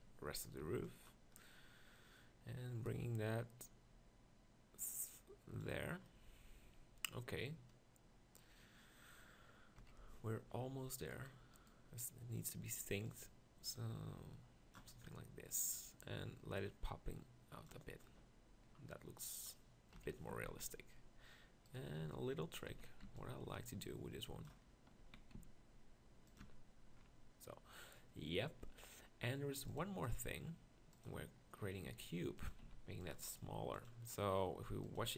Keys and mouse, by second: 0.6 b, 7.2 middle click, 9.9 KP_1, 15.2 middle click, 15.6-18.8 middle drag, 20.0 KP_1, 20.3 Tab, 20.5 z, 22.0 z, 22.7 z, 23.2 b, 25.0 z, 25.4 s, 26.5 Tab, 32.0 s, 32.5 s, 33.2 g.